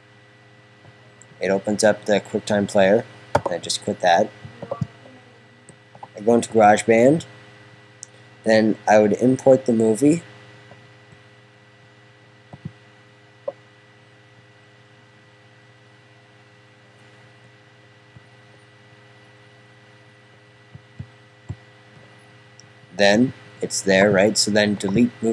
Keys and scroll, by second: 0.4 Tab, 6.0 Tab.